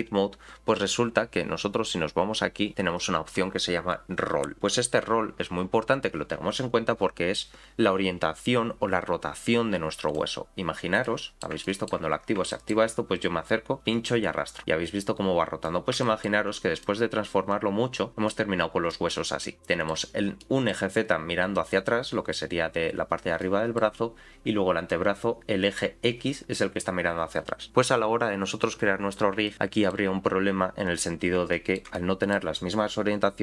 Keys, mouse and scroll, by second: 10.1 click, 11.0 middle click, 11.6 shift+middle click, 12.1 scroll up 5, 12.5 shift+middle click, 13.8-15.6 drag, 16.0 shift+middle click, 16.7 click, 17.5 click, 18.5-18.9 scroll down 3, 18.9 middle click, 20.4 middle click, 23.4 middle click, 24.9 middle click, 29.5 shift+middle click, 31.5 shift+middle click, 31.9 middle click.